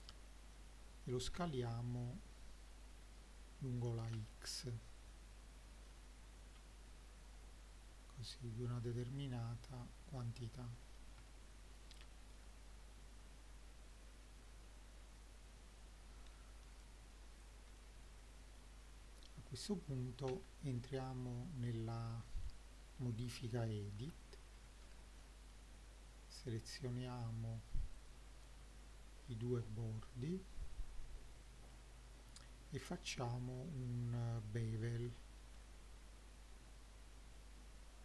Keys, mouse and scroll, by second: 1.4 s, 4.2 x, 9.2 click, 10.2 click, 10.8 middle drag, 11.3-12.3 shift+middle drag, 12.8-13.8 scroll up 3, 13.9 click, 16.3 g, 17.4 click, 17.8-18.1 middle drag, 18.4 middle drag, 18.8 scroll up 2, 19.2 click, 20.3 Tab, 22.0 scroll down 1, 22.2 middle click, 23.0-23.4 scroll up 2, 24.0 2, 24.6 scroll up 2, 24.8-25.5 middle drag, 26.5 click, 28.0 ctrl+click, 29.5-31.7 middle drag, 35.4 ctrl+b.